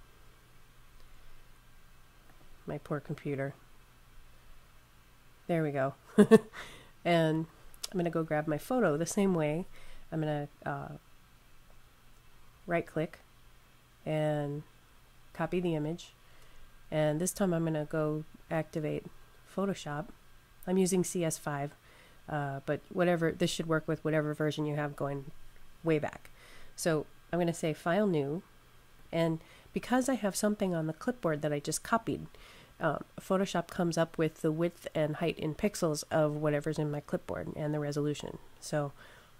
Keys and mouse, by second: 2.1 click, 7.3 click, 12.7 ctrl+click, 18.8 click, 27.0 click.